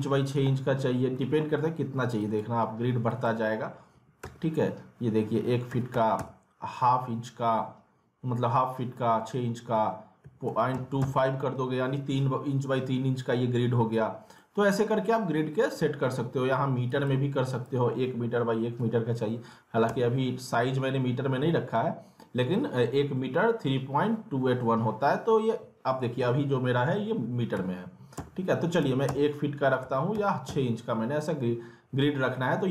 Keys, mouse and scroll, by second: 0.7-1.1 scroll down 1, 1.1 middle click, 2.2 click, 13.5-14.3 scroll down 1, 14.4 alt+middle click, 15.5 scroll up 1, 15.8 alt+middle click, 16.9 click, 18.8 m.